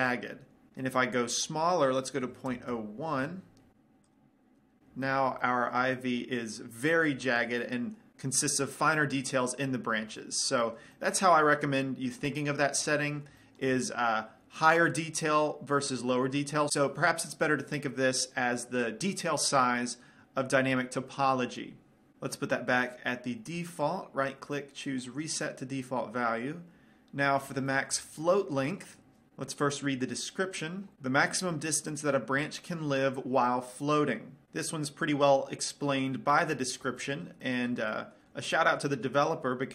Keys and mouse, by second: 1.6-3.4 drag, 4.3 click, 5.3-8.1 middle drag, 10.4-13.0 middle drag, 13.3-16.1 middle drag, 23.9-25.8 right drag, 27.9-29.3 middle drag, 35.9-39.7 middle drag.